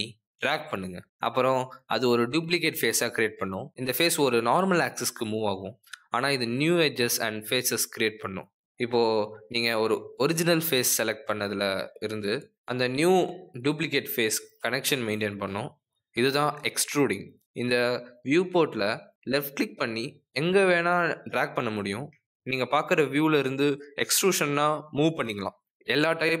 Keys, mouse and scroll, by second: 6.6 middle click, 7.4 middle click, 17.0 click, 22.1 middle click, 23.7 click, 24.6 shift+click, 25.4 click, 26.1 middle click.